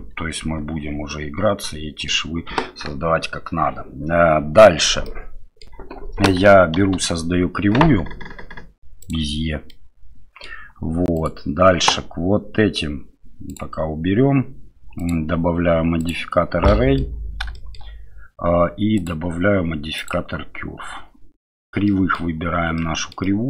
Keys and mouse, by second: 0.3 ctrl+1, 1.1-2.1 middle drag, 2.6 KP_1, 5.0-5.6 middle drag, 6.8 shift+a, 9.7-10.4 middle drag, 11.1 right click, 15.1-16.6 right drag, 16.6-17.0 middle drag, 17.5 shift+middle drag, 19.0-21.8 drag, 21.8 middle click, 22.7-23.1 middle drag, 23.2-23.4 middle drag.